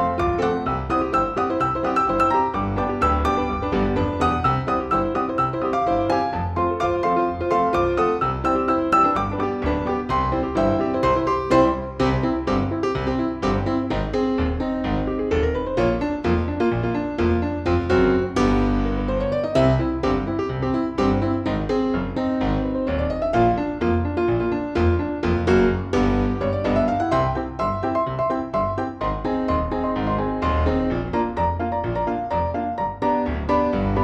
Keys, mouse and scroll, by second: 0.3 Down, 0.4 Down, 0.6 Down, 1.8 Up, 1.8 typing, 2.7 click, 4.9 click, 7.1 ctrl+g, 8.8-10.8 drag, 10.8 Down, 11.0 Down, 11.6 typing, 14.8 click.